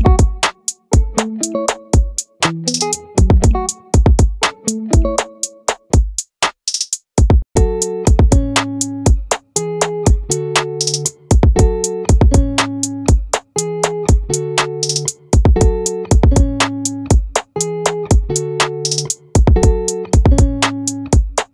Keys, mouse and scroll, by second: 6.1-7.1 middle drag, 7.1 right click, 10.7 right click, 11.3 middle click, 17.3-19.1 drag.